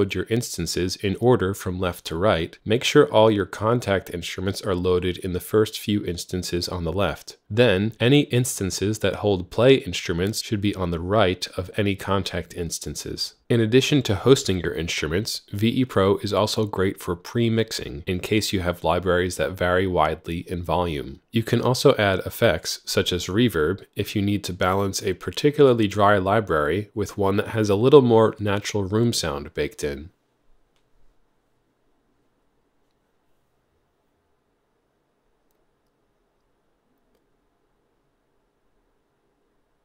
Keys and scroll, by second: 0.0-1.6 typing, 1.8 Return, 29.6 typing.